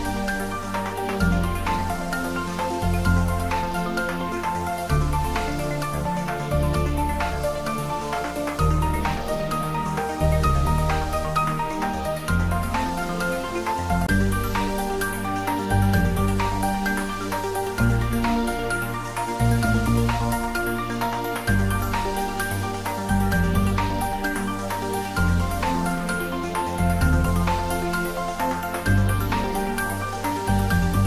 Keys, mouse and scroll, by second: 1.5 click, 8.9-12.2 middle drag, 12.2-12.6 scroll up 1, 14.4 shift+click, 17.9 scroll down 1, 18.8-20.8 middle drag, 20.8-21.2 scroll down 1, 23.0-23.4 scroll up 1, 25.2 click, 25.4 right click, 25.6-31.0 right drag.